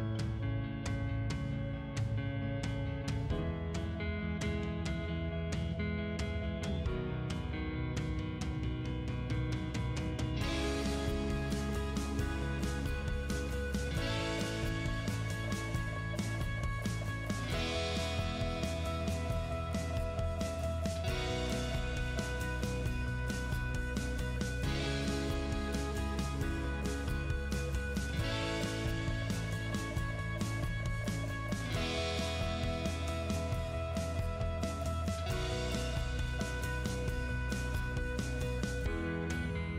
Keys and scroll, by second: 4.9-6.8 typing, 7.8 a, 9.5 c, 10.7 space, 17.2-18.1 typing, 23.1 space, 26.1-27.4 typing, 28.7 BackSpace, 35.9 m, 36.1 space.